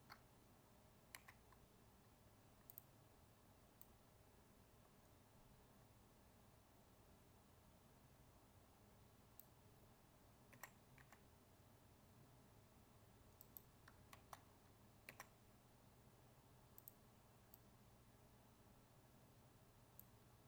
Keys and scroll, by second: 14.1 ctrl+z.